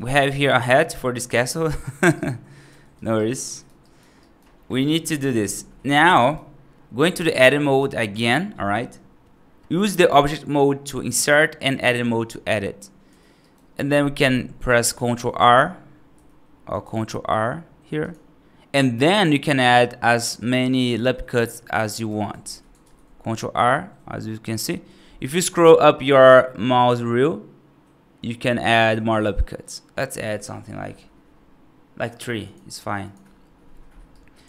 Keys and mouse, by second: 0.6-1.0 right drag, 1.6 right drag, 2.0 right drag, 2.5 g, 3.0 right drag, 3.3 right drag, 3.7 right drag, 4.1 right drag, 4.6 middle drag, 5.3 F3, 6.0 right click, 13.3 right click, 15.0 F2, 16.0 F3, 16.7 ctrl+r, 21.8 right click, 22.3 ctrl+z, 22.7 ctrl+r, 34.0 alt+right click.